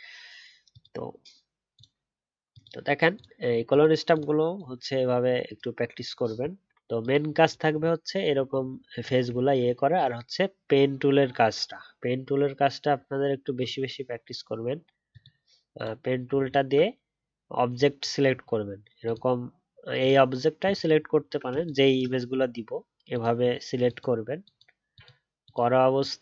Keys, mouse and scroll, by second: 7.7 alt+scroll down 1, 8.1 alt+scroll up 1, 9.3 alt+scroll down 1, 16.4-18.5 alt+scroll down 3, 16.7-18.5 alt+scroll up 1, 21.1 alt+scroll up 2.